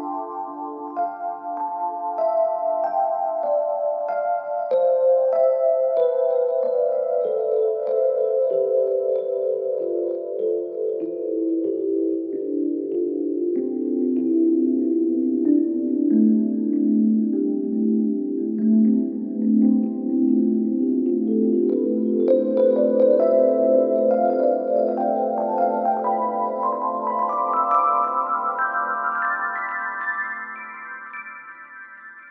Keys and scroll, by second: 9.2 ctrl+z.